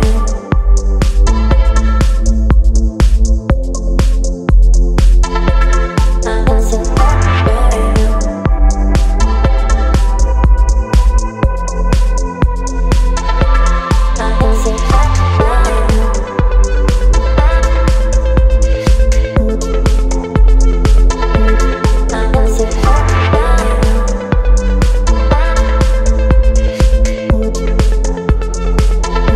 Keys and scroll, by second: 2.0 Delete, 2.5 Delete, 3.2 space, 4.3 Delete, 6.3 ctrl+BackSpace, 8.7 Delete, 10.4 space, 13.5 Return, 15.6 space, 18.8 Delete, 19.3 Delete, 24.9 Return, 26.7 Delete, 27.0 space.